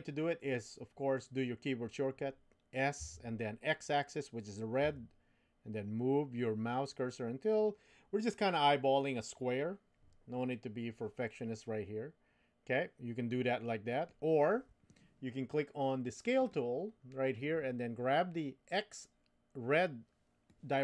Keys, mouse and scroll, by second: 3.0 s, 16.4 click, 20.5-20.8 drag.